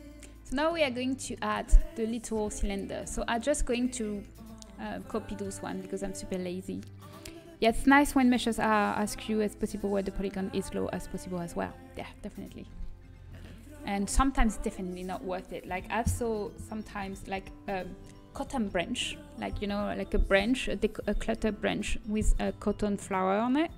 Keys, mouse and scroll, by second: 0.0 middle click, 1.9 Tab, 3.9-5.3 right drag, 5.3 KP_1.